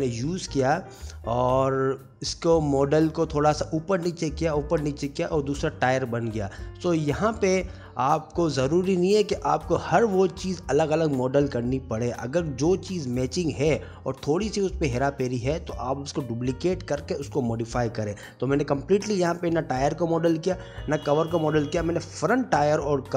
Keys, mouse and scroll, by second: 0.2 ctrl+s, 0.3 middle click, 0.6 shift+click, 0.7 g, 1.3 middle click, 1.6 click, 1.7 g, 3.3 middle click, 3.3 s, 3.5 g, 4.1 middle click, 4.8 Tab, 5.0 a, 5.2 click, 5.3 middle click, 5.6 middle click, 5.6 scroll down 2, 5.8 alt+e, 6.8 Tab, 6.9 middle click, 8.5 middle click, 8.5 scroll down 2, 8.6 middle click, 8.6 Tab, 9.0 click, 9.1 g, 9.7 click, 9.9 middle click, 10.0 scroll down 1, 10.3 c, 10.7 click, 10.8 c, 11.5 middle click, 11.5 scroll up 1, 11.6 g, 12.0 shift+click, 12.1 g, 12.6 middle click, 13.4 Tab, 13.6 s, 15.3 middle click, 16.0 shift+click, 16.1 g, 16.6 click, 16.9 middle click, 17.2 shift+c, 17.4 shift+middle click, 17.6 shift+d, 17.9 ctrl+m, 18.8 click, 19.3 ctrl+m, 20.0 click, 20.4 middle click, 20.6 middle click, 21.4 scroll down 1, 21.6 scroll down 2, 21.8 scroll up 1, 21.9 shift+middle click, 22.0 shift+middle click, 22.6 ctrl+s, 22.6 middle click.